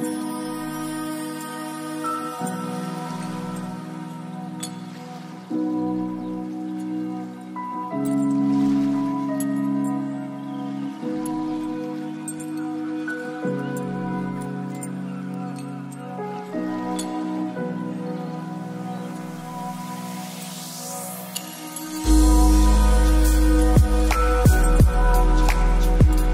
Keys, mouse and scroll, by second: 0.3 a, 0.4 scroll down 1, 0.6 middle click, 0.7 right click, 1.1 shift+click, 1.9-4.3 typing, 2.9 middle click, 3.1 right click, 5.1 ctrl+z, 5.2 scroll down 2, 5.3 middle drag, 5.5 ctrl+z, 5.7 g, 5.9 scroll down 1, 6.1 right click, 6.4 r, 6.6 g, 7.9 r, 8.1 scroll down 1, 8.3 scroll up 1, 8.5 middle drag, 8.7 g, 9.7 middle drag, 9.9 scroll up 2, 10.1 middle drag, 10.3-10.7 right drag, 10.5 middle click, 10.7 g, 13.0 scroll up 4, 13.2 r, 13.6-14.3 scroll up 3, 14.3 right click, 14.8 middle drag, 15.0 scroll down 2, 15.2 right click, 15.5-16.6 shift+drag, 16.9-17.3 scroll down 4, 17.3 g, 17.9 middle drag, 17.9 scroll down 1, 18.0 g, 19.8 click, 20.0-20.4 middle drag, 20.7 middle click, 20.9 middle click, 21.1 click, 21.3 middle click, 21.7 click, 22.0 r, 22.2 right click, 22.4 r, 23.8 g, 24.9 r, 25.9 ctrl+z.